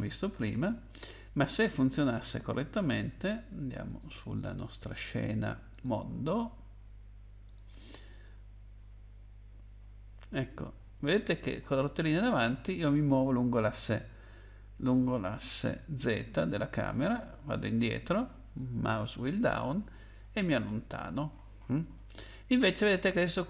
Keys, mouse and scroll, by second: 3.9 click, 5.7 click, 7.4 click, 10.6-11.6 scroll up 2, 11.6 scroll up 2, 12.8 scroll up 1, 13.4 scroll up 2, 14.2 scroll up 1, 15.1-16.1 scroll down 8, 17.5 scroll down 1, 19.5 scroll down 1, 20.1-20.9 scroll down 8, 20.9-22.6 scroll up 8.